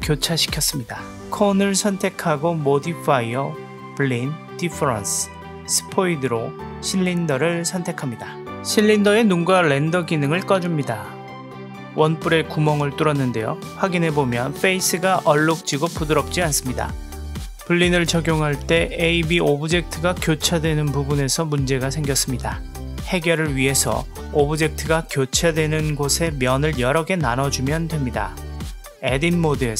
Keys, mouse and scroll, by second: 0.1 click, 2.8 click, 3.2 click, 5.4 click, 7.7 click, 9.7 click, 10.5 click, 11.9-15.7 middle drag, 18.4-21.5 middle drag, 23.9 click, 24.8 Tab, 27.6 click.